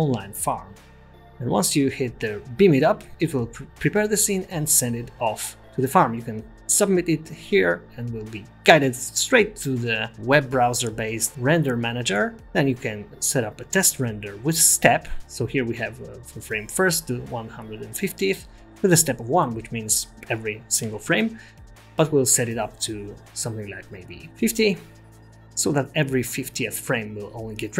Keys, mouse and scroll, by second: 0.9 click, 3.7 click, 5.7 click.